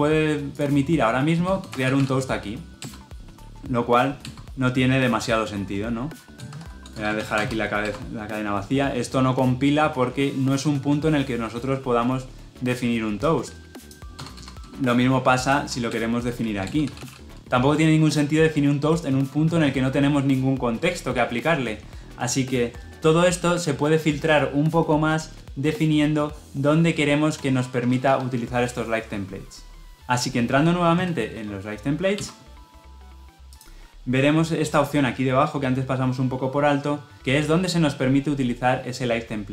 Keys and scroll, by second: 2.7 Return.